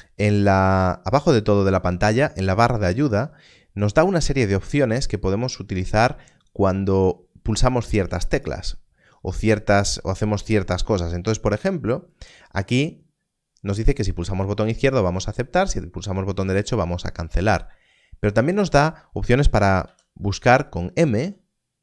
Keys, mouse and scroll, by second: 21.1 m.